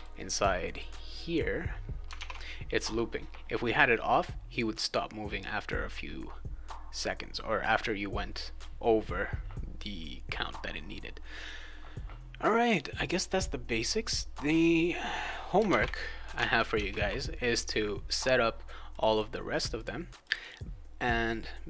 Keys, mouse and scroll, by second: 0.7 click, 2.1 alt+Tab, 15.6 alt+Tab, 16.3 alt+Tab, 16.7 alt+Tab, 18.9 click, 19.0 click, 19.5 click, 19.7 click, 20.2 click, 20.4 click.